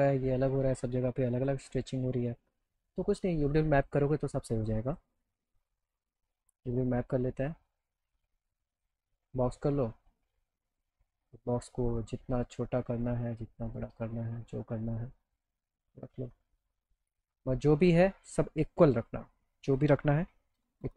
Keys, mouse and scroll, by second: 1.4 click, 2.0 middle click, 2.6 middle click, 3.8 click, 4.9 click, 6.2 h, 7.4 click, 8.7 click, 9.5 middle click, 9.8 alt+middle click, 11.8 click, 13.8-15.6 drag, 16.4 click, 19.3 click.